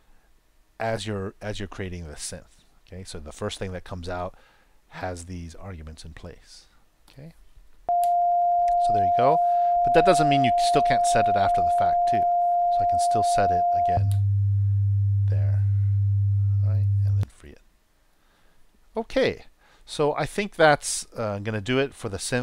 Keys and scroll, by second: 7.8 super+Return, 13.8 super+Return, 17.1 super+Return.